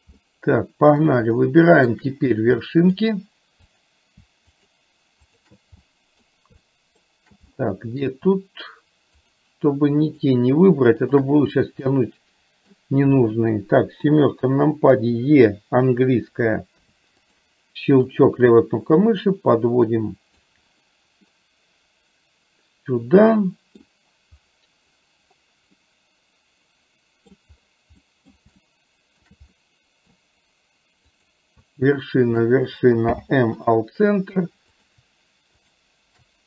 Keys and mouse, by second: 0.2 middle click, 1.4 shift+middle click, 2.7 middle click, 4.6 shift+click, 5.5 shift+click, 6.3 middle click, 6.7 shift+middle click, 7.6 middle click, 10.1 shift+click, 11.1 shift+click, 12.0 middle click, 14.1 KP_7, 17.0 e, 18.1-20.5 drag, 21.4-23.9 middle drag, 25.9-27.4 middle drag, 28.1 middle click, 28.7 shift+middle click, 29.6 middle click, 31.1 click, 32.4 shift+click, 33.2 m.